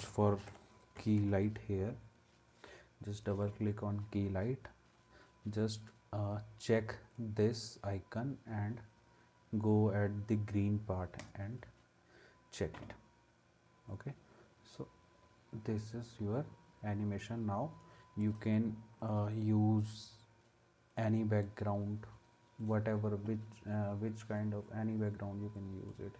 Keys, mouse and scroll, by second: 0.0-1.7 typing.